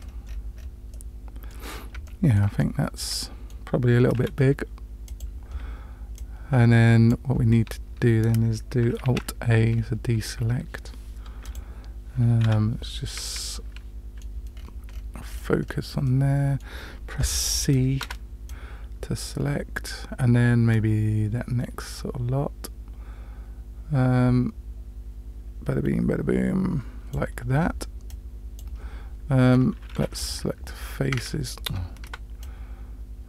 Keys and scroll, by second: 4.2 s, 9.1 alt+a, 12.4 KP_Decimal, 18.0 c, 32.0 c.